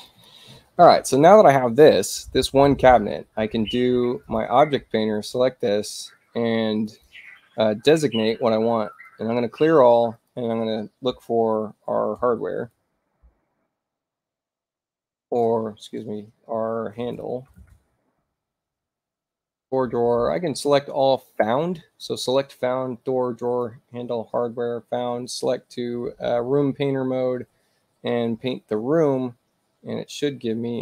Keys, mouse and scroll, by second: 0.0 click, 4.3 click, 5.2 click, 6.9 click, 8.9 click, 10.2 click, 12.1-13.2 typing, 15.1 click, 16.8-18.2 typing, 20.4 click, 23.4 click, 28.3 click.